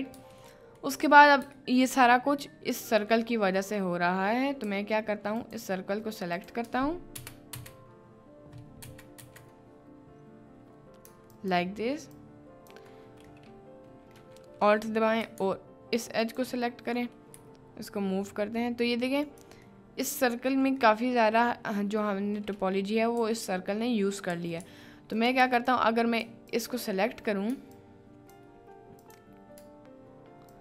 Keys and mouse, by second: 0.4 middle click, 1.5 shift+middle click, 2.9 middle click, 3.9 middle click, 4.6 3, 7.1 ctrl+KP_Add, 11.3 ctrl+click, 12.3 ctrl+click, 13.3 middle click, 16.3 shift+click, 17.3 g, 19.3 click, 19.8 middle click, 20.1 click, 20.8 click, 23.2 1, 24.3 3, 24.6 2, 25.2 click, 25.6 alt+click, 27.7 ctrl+click.